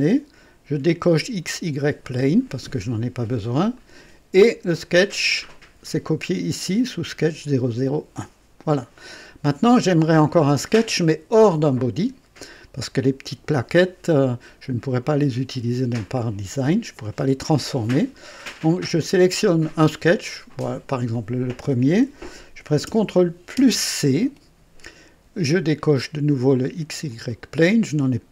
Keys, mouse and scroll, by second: 2.0 click, 3.7 click, 19.0 click, 20.5 click, 23.5 ctrl+c, 27.0 click.